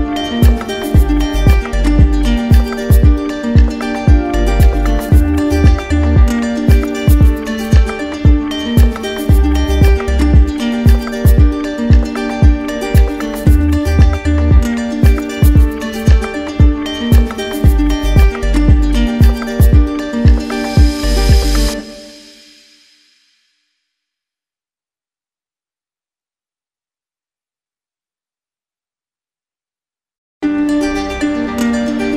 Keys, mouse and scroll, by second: 1.6 click, 4.0 click, 5.4 alt+click, 7.2 alt+click, 7.4-10.4 right drag, 11.0 right click, 12.9-13.9 drag, 15.8-17.5 drag, 17.7-18.8 right drag, 18.9-20.0 right drag, 20.4-21.6 drag, 21.6 right click, 24.8 click, 29.5 click, 30.4-31.6 alt+right drag.